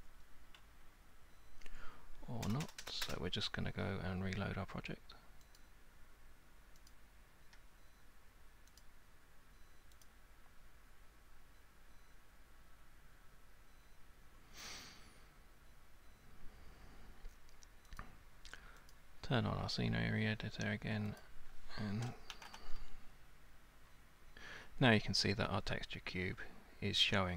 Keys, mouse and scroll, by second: 0.0-0.6 typing, 2.5 BackSpace, 2.7 BackSpace, 2.8 BackSpace, 3.0 BackSpace, 5.6 click, 6.9 click, 8.8 click, 10.0 click, 18.0 click, 18.9 click, 21.2 click, 22.3 typing, 23.7 x.